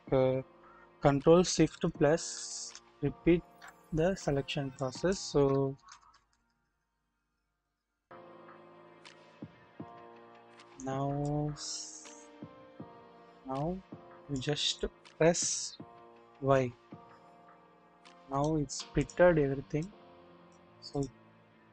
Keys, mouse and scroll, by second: 2.1 ctrl+shift+KP_Add, 4.7 click, 5.7-7.2 ctrl+shift+], 7.6 ctrl+shift+], 10.1 ctrl+shift+], 11.2-14.3 drag, 16.2 y, 18.3-18.7 drag, 19.0 click, 19.8 click.